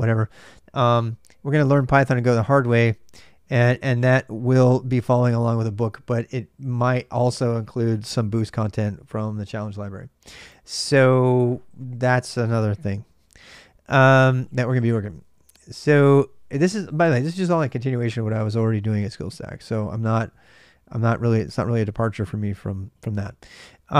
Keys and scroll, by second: 14.1 ctrl+a, 14.3 ctrl+a, 15.0 ctrl+[, 15.1-15.9 typing, 19.8-21.8 typing.